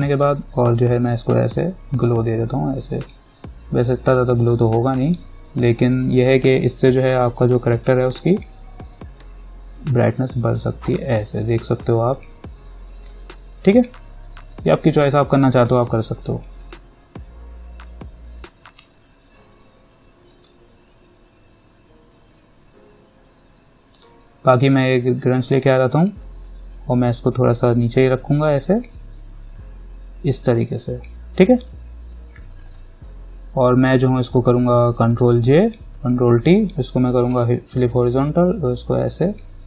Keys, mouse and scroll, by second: 0.1 alt+right click, 0.6-9.8 drag, 16.3-17.4 scroll up 1, 18.5 click, 24.9-26.4 drag, 27.4-31.2 alt+drag, 31.2-32.7 alt+drag, 35.4 ctrl+j, 36.1 ctrl+t, 36.5 right click, 37.5-39.6 drag.